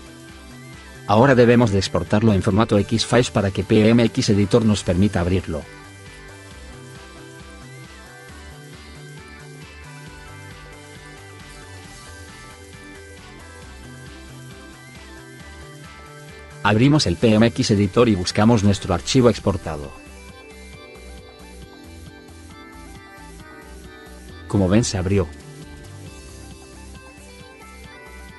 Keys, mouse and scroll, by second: 8.3 click, 8.5 click, 22.7 click, 23.0 click.